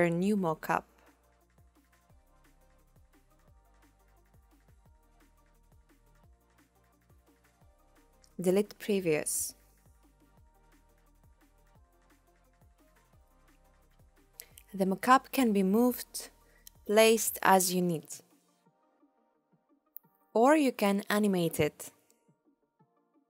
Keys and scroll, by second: 5.7 BackSpace, 17.3 p.